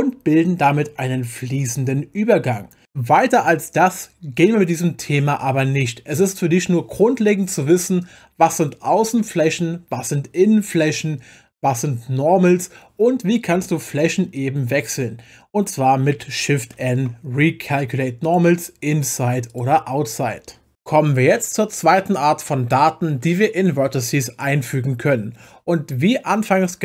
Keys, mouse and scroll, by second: 13.5 Tab, 14.8 click, 16.7 shift+n, 18.2 click, 19.5 click.